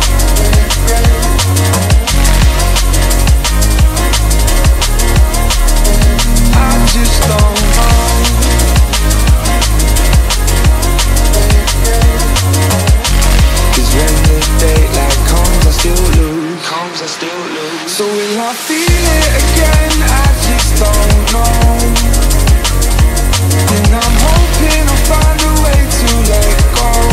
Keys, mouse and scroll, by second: 0.3-1.3 scroll down 1, 1.3-4.0 scroll down 1, 4.0 scroll down 1, 4.1-7.1 drag, 10.2 space, 16.8-17.3 scroll down 1, 17.4-19.5 middle drag, 19.5 click, 21.9-24.9 middle drag.